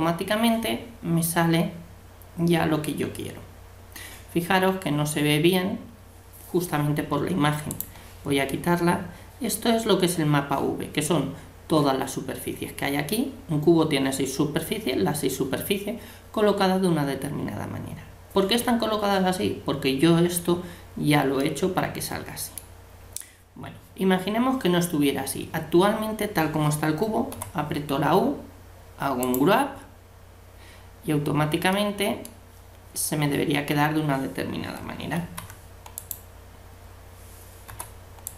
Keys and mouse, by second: 2.0-7.7 middle drag, 7.7-9.5 drag, 9.5 middle click, 21.5-23.2 middle drag, 27.3 u, 31.8-35.2 middle drag, 35.2 ctrl+e, 37.7 u.